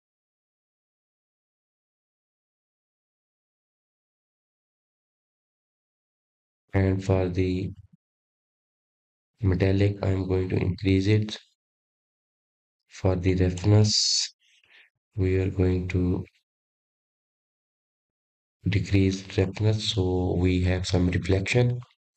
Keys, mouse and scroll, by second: 1.6 click, 2.0 click, 9.8-10.8 scroll down 7, 10.8-12.8 scroll down 1, 12.8-15.9 drag, 16.6-18.7 drag, 19.1-22.1 drag.